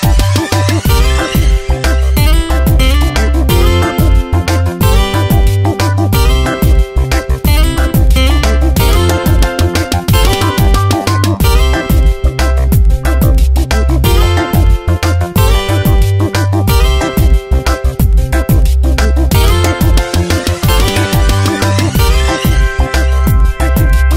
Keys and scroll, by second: 13.6 space, 14.2 ctrl+z, 18.4 ctrl+Return.